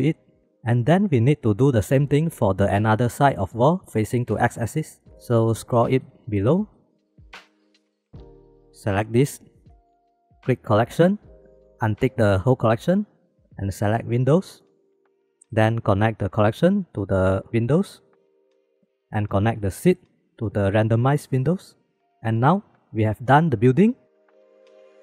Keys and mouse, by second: 5.7 click, 6.0 middle click, 6.5 middle click, 6.8 middle click, 7.7-8.4 middle drag, 8.5 middle click, 8.8 click, 9.6 m, 10.2 m, 10.8 click, 12.5 click, 13.4-14.9 drag, 15.5 click, 16.0-16.7 middle drag, 16.7-18.1 drag, 18.1-19.3 middle drag, 19.3-21.8 drag, 21.8 middle click.